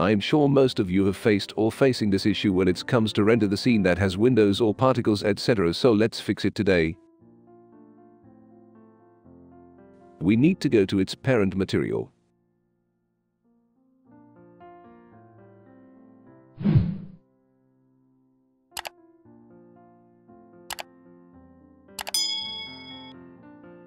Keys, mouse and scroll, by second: 1.5-3.1 drag, 7.0 click, 8.8 click, 12.0 click, 12.8 right click, 13.2 click, 13.3 click, 13.6 click, 14.2 click, 15.0 click, 15.4 click, 15.9 click, 16.6 middle click, 17.0 click, 18.2 click, 19.0-20.3 right drag, 20.6 click, 21.5 middle click, 22.6 click, 23.4 click.